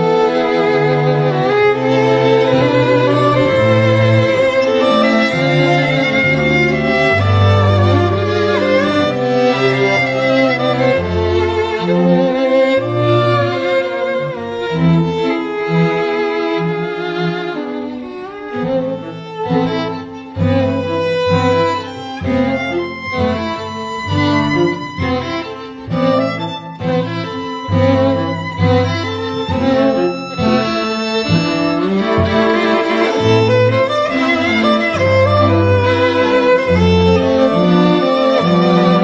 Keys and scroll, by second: 24.8 x, 25.8 ], 26.0 ], 26.1 ].